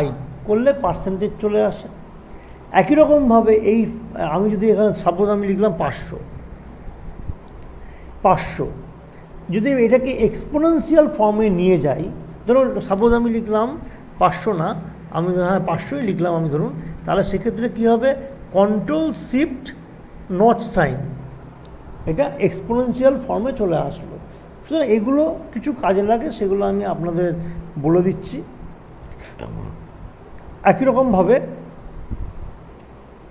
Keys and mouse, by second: 4.5 click, 5.8 5, 6.9-7.6 typing, 7.8 click, 18.5 click, 20.5 ctrl+shift+6, 28.4 click.